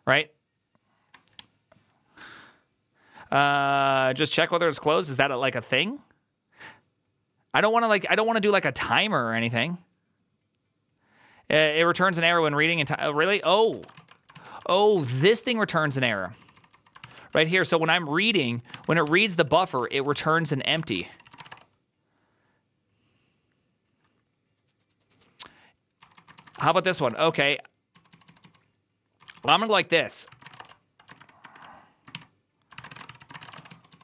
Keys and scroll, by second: 13.4-21.7 typing, 14.5 ctrl+c, 16.9 ctrl+c, 17.0 ctrl+c, 18.9 ctrl+c, 20.8 ctrl+c, 26.2-30.9 typing, 31.0 ctrl+^, 31.3 ctrl+^, 32.0-34.0 typing.